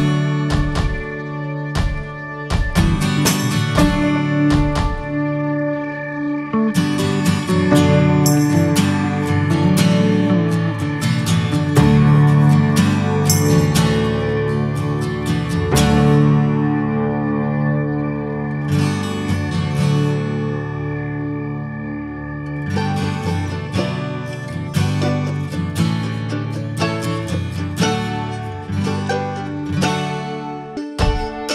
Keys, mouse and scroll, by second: 0.0 click, 0.9 scroll down 3, 1.2 middle click, 1.4 Tab, 1.9-3.3 shift+middle drag, 3.3 ctrl+s, 4.0-4.3 drag, 4.3-5.2 middle drag, 5.2 Tab, 5.4-6.6 middle drag, 6.6 p, 7.1-8.2 drag, 8.2 /, 8.6-9.0 middle drag, 9.0 Tab, 9.3 middle click, 9.6 alt+z, 10.0 shift+middle click, 10.2-10.7 scroll up 2, 10.3 alt+z, 10.5 middle click, 11.4 3, 11.6 click, 13.6 ctrl+z, 14.1 alt+shift+click, 14.8 scroll down 2, 15.1-17.1 middle drag, 17.1 alt+z, 17.3-18.3 shift+middle drag, 18.3 g, 19.2-20.3 middle drag, 20.3 x, 20.8-22.0 middle drag, 22.0-23.0 scroll up 4, 22.3 shift+middle click, 22.6 click, 23.6 alt+shift+click, 24.1 x, 24.7 scroll down 1, 24.9-25.2 middle drag, 25.2 click, 25.5 ctrl+a, 25.6 scroll down 2, 25.8 middle click, 26.0 scroll up 1, 26.4 Tab, 26.7 shift+middle click, 27.0 scroll up 1, 27.3 middle click, 28.2 2, 28.8 click, 29.6 scroll down 2, 30.0 shift+middle click, 30.3-30.8 scroll up 3, 30.5 shift+middle click, 31.0 middle click, 31.3-31.5 scroll up 4.